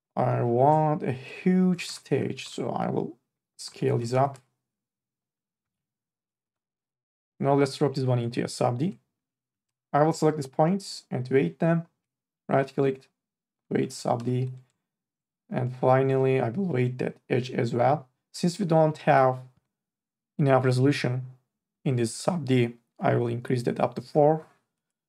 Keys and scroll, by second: 2.1 ctrl+a, 2.4 t, 4.1 3, 4.3 e, 6.4 2, 9.5 1, 9.7 e, 14.0 2, 14.4 e.